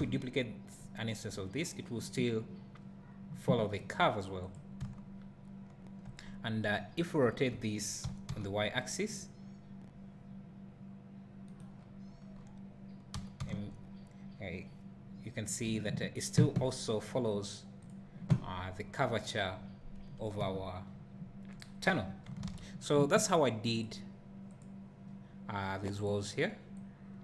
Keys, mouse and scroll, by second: 4.6 click, 4.9 `, 6.3-7.3 scroll up 2, 7.3 `, 8.1 r, 11.6 right click, 11.8 scroll down 2, 12.1 scroll up 1, 12.2 scroll down 1, 12.4 scroll up 1, 13.2 r, 17.9 click, 18.5-19.0 scroll down 1, 20.4 KP_0, 22.5 alt+a.